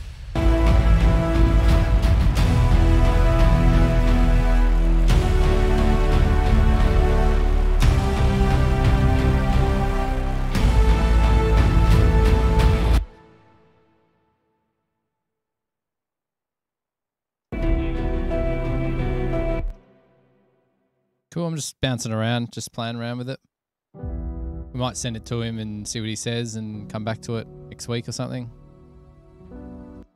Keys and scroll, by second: 1.6 super+=, 8.8 super+=, 13.2 space, 13.6 super+z, 19.6 super+=, 19.8 Return, 20.6 super+[, 20.7 super+[, 22.9 super+].